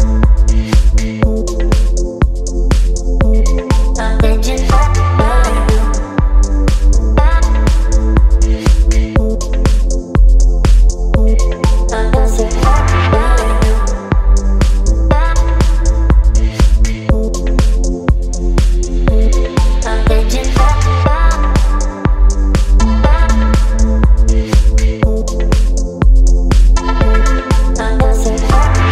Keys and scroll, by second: 8.9 Right, 9.3 Right, 9.4 Right, 9.6 Right, 11.7 Left, 14.0 space, 24.1 Right, 24.8 Right, 25.0 Right.